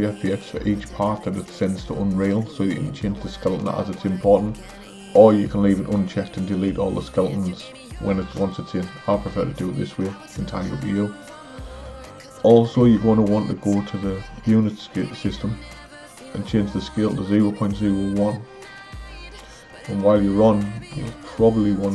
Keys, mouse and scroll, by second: 20.9 n.